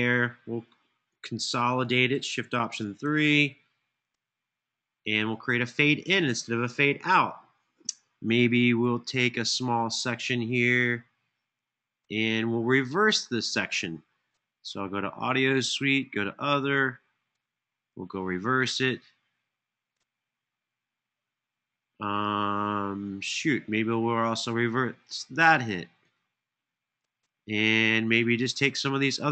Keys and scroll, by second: 2.7 alt+shift+3.